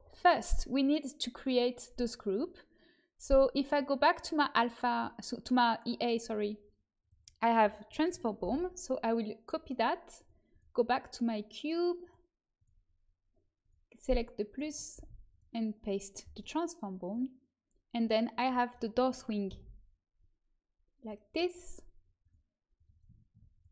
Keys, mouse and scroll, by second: 1.4-3.0 drag, 3.6-5.2 drag, 6.9-8.9 drag, 10.4-16.4 drag, 17.0-23.7 drag.